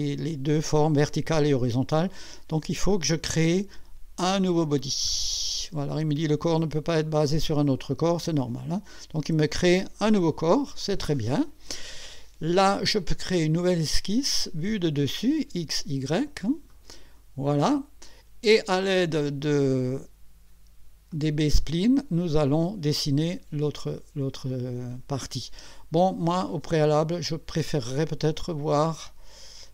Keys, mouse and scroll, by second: 2.9 click, 5.1 click, 8.4 click, 13.3 click, 14.8 click, 16.7 click, 21.1 click, 26.9 click.